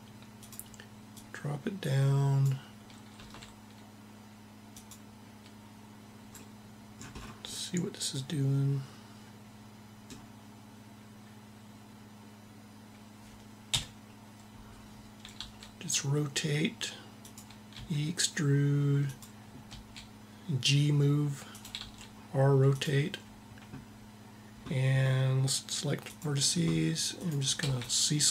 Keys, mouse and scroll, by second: 0.2 click, 0.8-2.2 right drag, 2.9 r, 13.3 KP_1, 15.0 r, 17.4 e, 19.5 g, 21.5 r, 25.7-28.3 drag, 27.5 c.